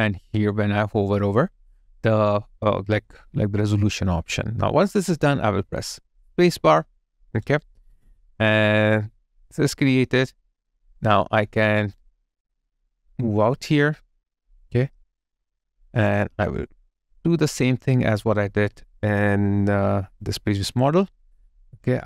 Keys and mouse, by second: 6.1 space, 7.2 alt+right click, 7.6 alt+click, 8.2 alt+middle click, 20.7 alt+click.